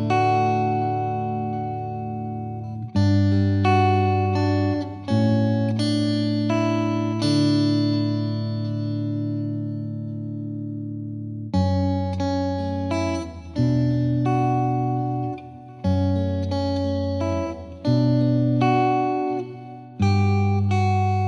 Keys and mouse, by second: 8.3 click, 9.4 ctrl+click, 11.7 click, 14.8-15.8 drag, 15.9 click, 19.0 ctrl+click, 19.6 click.